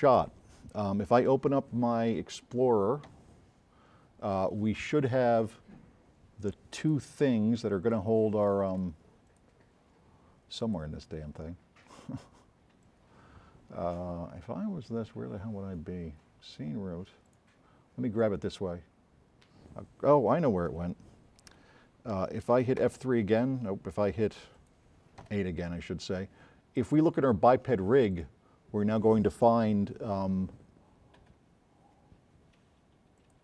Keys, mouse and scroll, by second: 3.3 8, 6.8 click, 7.8 click, 8.7 click, 9.3 click, 12.8-13.3 drag, 18.2 middle click, 22.9 F3, 24.6 click, 25.2 8, 26.9-27.6 drag, 33.2 click.